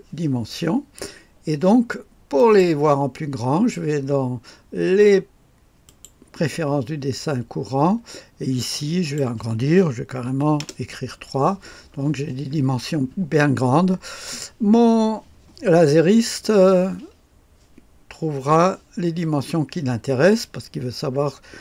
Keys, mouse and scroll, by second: 2.3 click, 5.8 click, 6.5 click, 8.6-9.8 drag, 10.2 KP_3, 10.5 Return.